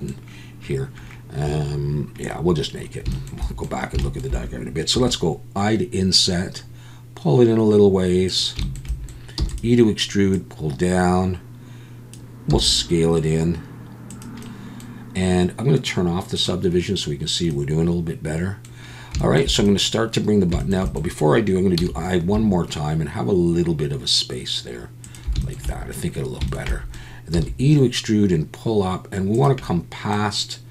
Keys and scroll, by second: 9.4 e, 27.3 e.